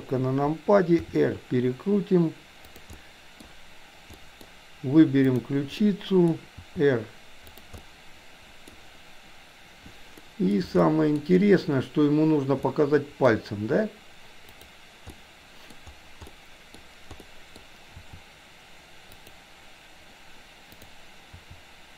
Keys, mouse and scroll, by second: 0.9 r, 2.9 middle click, 4.3 middle click, 5.3 click, 5.8-6.2 middle drag, 6.5 r, 7.8-8.8 middle drag, 10.2-10.5 middle drag, 10.8-11.2 shift+middle drag, 12.7-13.4 middle drag, 14.4 click, 15.2-15.7 middle drag, 16.2-16.8 middle drag, 17.2 middle click, 17.9 r, 20.7 click, 21.3 r.